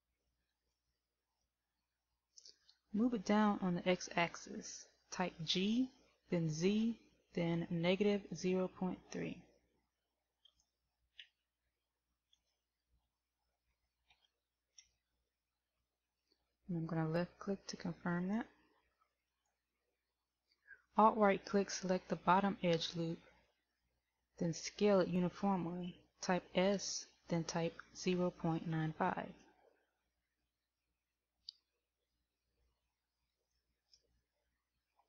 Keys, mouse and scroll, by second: 0.8 alt+right click, 10.8 g, 33.4 alt+right click.